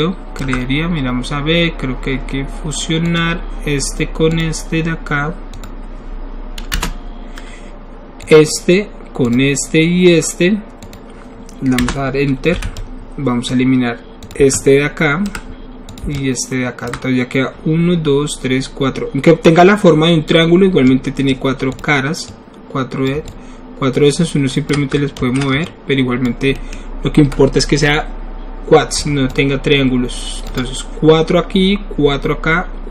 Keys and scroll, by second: 6.9 Return, 12.5 w, 25.2 ctrl+alt+z.